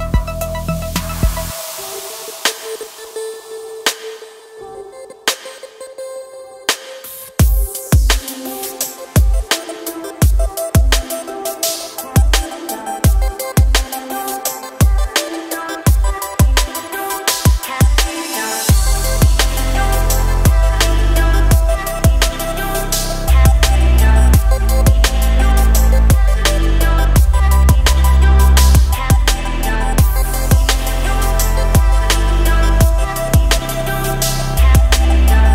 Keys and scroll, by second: 12.4 g, 17.5 g, 23.8 g, 29.7 g.